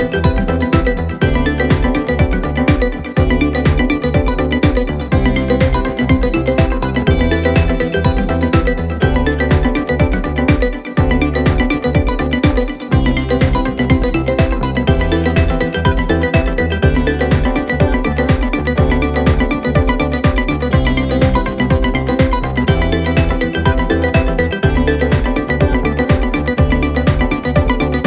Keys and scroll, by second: 7.8 1, 8.3 Return, 9.6 Return, 10.7 6, 11.0 Return, 12.1 6, 12.3 Return.